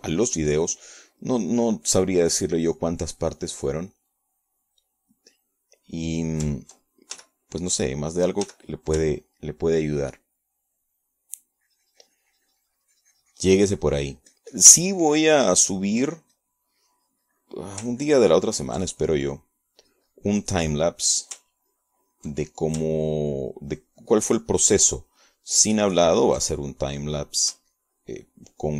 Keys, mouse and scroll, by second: 0.0 shift+click, 1.1 ctrl+s, 1.5 ctrl+click, 6.3 click, 7.1 click, 7.9 click, 9.2 ctrl+f, 9.6 ctrl+click, 10.5 f, 10.7 click, 11.1 ctrl+click, 13.4-18.0 ctrl+drag, 18.1-19.7 ctrl+drag, 19.9-20.9 ctrl+drag, 20.9 ctrl+middle click, 21.9 click, 22.9 middle click, 23.5 ctrl+click, 25.0-28.5 ctrl+drag.